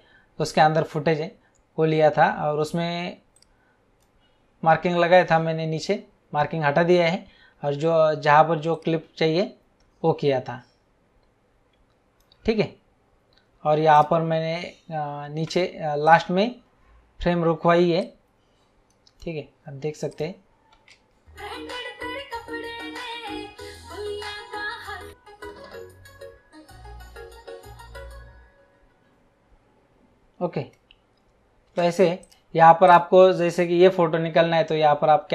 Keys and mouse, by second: 3.3 click, 8.7 click, 13.9 click, 14.5 space, 16.0 click, 18.0 click, 20.1 click, 20.7 space, 31.6 space, 32.1 click.